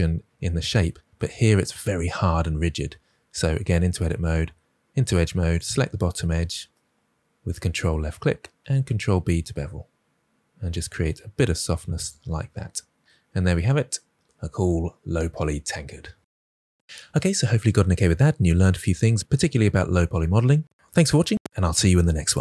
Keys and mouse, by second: 3.4 Tab, 4.3 2, 5.4 click, 8.6 ctrl+b, 11.9 click, 12.2 Tab.